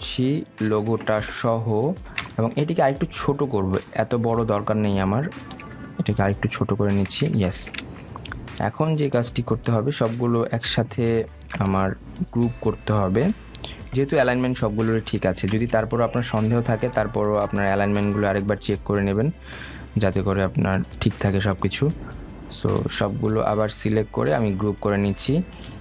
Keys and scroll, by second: 15.3 ctrl+g, 17.1 ctrl+z.